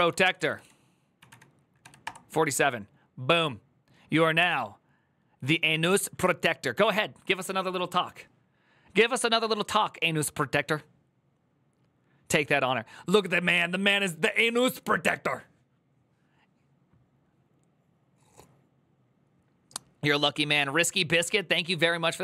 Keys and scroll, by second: 0.0-1.6 typing, 1.8 Return.